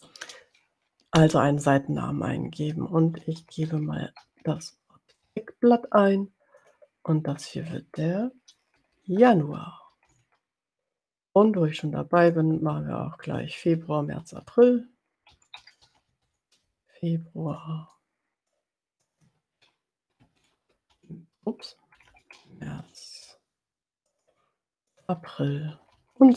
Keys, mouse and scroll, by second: 2.9-5.6 typing, 6.5 click, 7.6 click, 9.0-10.8 typing, 11.4 middle click, 12.5 click, 13.5 click, 14.6-17.0 typing, 17.7 click, 17.9 middle click, 18.9 click, 20.2-22.8 typing, 24.0 click, 24.8 click, 25.8-26.3 typing.